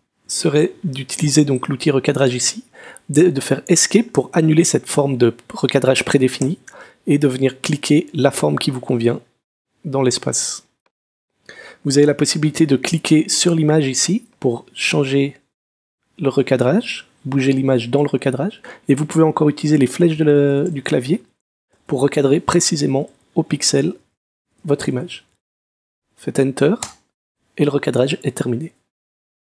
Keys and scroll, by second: 6.4 ⟲, 20.0 Down, 20.5 Left, 20.8 Up, 21.3 Right, 21.7 Up, 22.9 Right, 23.5 Left, 23.6 Down, 24.4 Left, 24.6 Up, 24.8 Right, 25.3 Left, 26.8 Return.